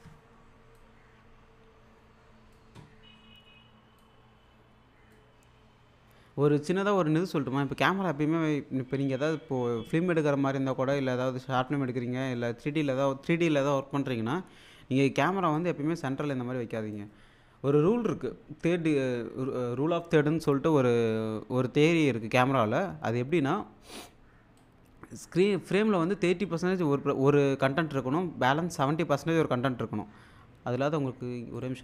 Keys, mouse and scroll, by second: 0.8-2.6 drag, 4.0-5.2 drag, 15.6-17.1 drag, 24.6-25.2 drag, 31.6 click.